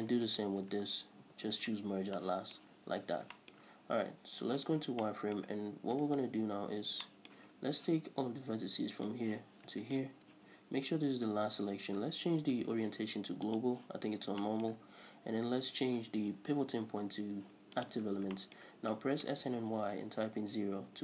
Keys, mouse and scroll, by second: 0.3 shift+right click, 1.4 shift+r, 2.0 scroll down 1, 2.2-6.1 shift+middle drag, 2.8-3.4 scroll up 2, 4.6 z, 6.1 alt+right click, 7.1-9.0 shift+middle drag, 9.0 right click, 9.9 ctrl+right click, 12.4 ,, 14.5-21.0 shift+middle drag, 16.6 ., 19.1 s, 20.9 Return.